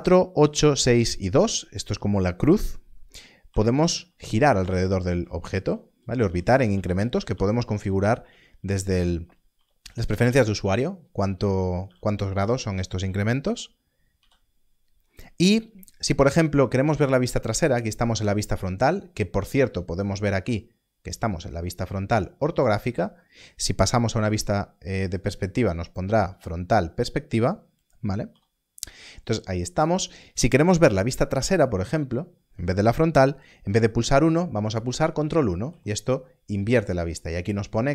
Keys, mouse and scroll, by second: 3.4-14.1 typing, 16.1 KP_1, 24.2 KP_5, 28.2 KP_5, 35.6 ctrl+KP_1.